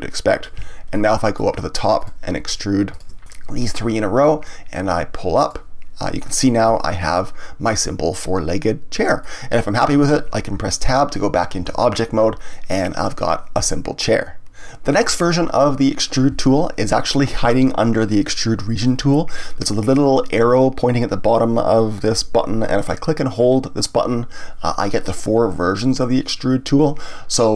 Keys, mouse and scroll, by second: 0.9-2.0 middle drag, 2.0 click, 2.4 shift+click, 2.9 shift+click, 4.4-6.2 drag, 6.2-6.8 scroll down 1, 6.8-9.9 middle drag, 11.6 Tab, 12.5-14.6 middle drag, 23.8-26.8 drag.